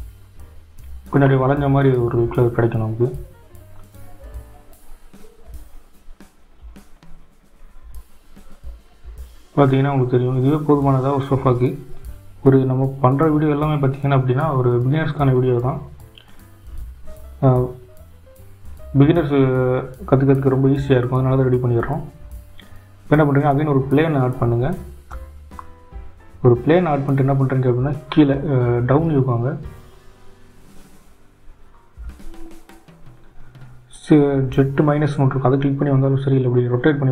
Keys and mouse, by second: 0.1-1.6 drag, 2.6 g, 8.7-10.4 drag, 11.5-12.9 drag, 32.9 shift+a, 34.2 s.